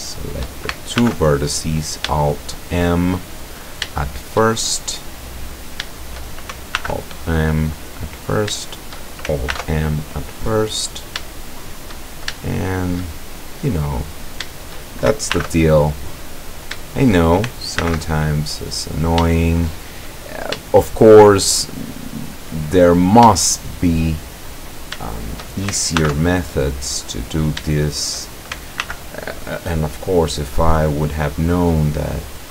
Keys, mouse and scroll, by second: 0.0 shift+right click, 1.0 alt+m, 1.7 click, 2.3-3.3 shift+middle drag, 3.6 shift+scroll down 1, 4.0-4.6 shift+middle drag, 4.6-5.1 shift+scroll up 1, 5.6 right click, 6.0 shift+right click, 6.8 alt+m, 7.3 alt+click, 8.3 shift+right click, 8.7 shift+right click, 9.5 alt+m, 10.0 alt+click, 10.8 scroll down 2, 11.3-11.9 shift+middle drag, 12.4-13.1 shift+middle drag, 13.2-14.2 shift+scroll up 3, 14.2 right click, 14.6 shift+right click, 15.4 alt+m, 15.8 alt+click, 16.5 right click, 16.9 shift+right click, 17.8 alt+m, 18.3 alt+click, 18.8-19.1 alt+scroll down 3, 19.4-20.1 shift+middle drag, 20.7 shift+scroll up 1, 20.8-21.4 shift+middle drag, 22.1-23.2 drag, 23.4-24.1 shift+middle drag, 24.7 right click, 25.1 shift+right click, 26.0 alt+m, 26.6 alt+click, 26.9 middle click, 27.4 shift+right click, 27.7 shift+middle click, 27.9 shift+right click, 28.9 alt+m, 29.3 alt+click, 31.3-32.5 drag.